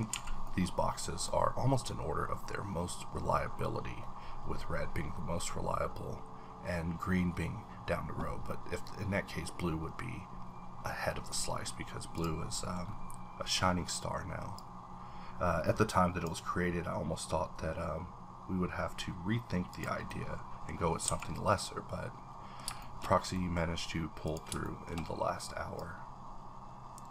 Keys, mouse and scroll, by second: 0.1-0.4 scroll down 1, 0.1 a, 0.4-3.7 middle drag, 11.6 middle click, 11.7 scroll up 2, 12.1 click, 12.5 middle click, 12.6 scroll down 1, 12.8-14.6 scroll up 1, 14.6-18.9 drag, 18.7-19.7 scroll down 3, 19.7 click, 20.1 middle click, 20.7-21.0 scroll up 1, 21.0 a, 21.2-22.8 middle drag, 22.8 shift+middle click, 23.3 middle click, 23.3-24.2 scroll down 1, 24.2 click, 24.6 shift+middle click, 24.6 shift+scroll down 1, 24.9 shift+scroll up 1, 25.7-27.1 drag, 26.1-27.1 scroll up 1.